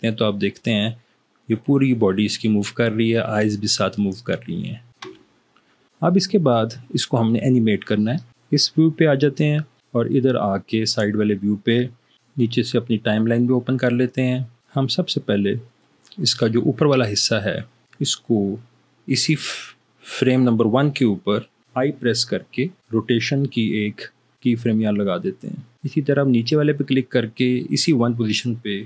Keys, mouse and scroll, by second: 5.3 Escape, 8.5 3, 22.9 i.